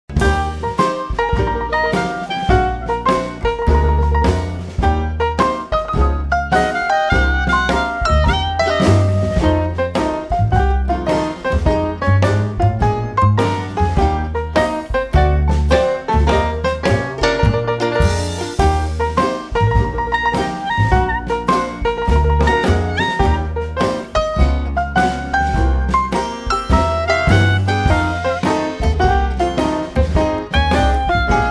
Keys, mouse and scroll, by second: 3.3 click, 3.7 right click, 4.5 click, 6.7 click, 7.7 click, 10.5 click, 11.7 click, 13.1-15.0 drag, 16.3-18.5 drag, 19.0 right click, 22.7 click, 25.5 click, 26.5 2, 27.4-28.8 drag, 29.4-30.3 typing, 31.4 click.